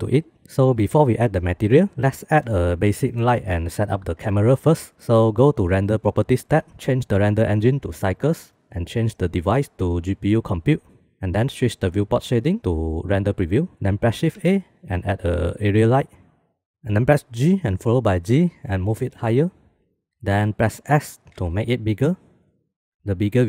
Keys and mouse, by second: 3.8 shift+middle click, 5.6 click, 7.5-8.4 drag, 9.7-10.9 drag, 12.7 click, 13.7 shift+a, 17.3 g, 21.3 s.